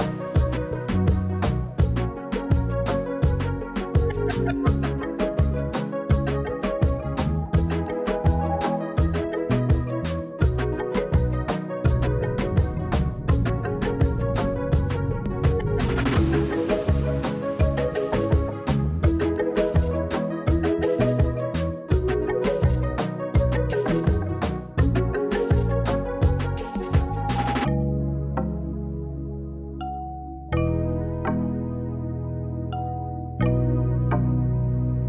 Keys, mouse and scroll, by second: 0.0-1.1 drag, 1.7-2.5 middle drag, 2.8 Tab, 3.4 middle click, 4.6 click, 5.9 shift+e, 7.0 click, 7.1 Tab, 7.4-8.5 middle drag, 8.9 Tab, 9.3-10.3 middle drag, 11.0 click, 11.6 middle click, 13.0 alt+click, 14.3 shift+e, 16.1 click, 16.9 click, 17.2 middle drag, 18.1 click, 18.3-20.3 middle drag, 20.6 click, 21.1-22.2 middle drag, 24.3 shift+e, 25.2 click, 25.8 click, 26.2-26.9 middle drag, 27.4 Tab, 27.4 middle drag, 27.7 click, 30.2 click, 31.5 click, 31.9 click, 32.2 click, 33.3 click, 34.8 z.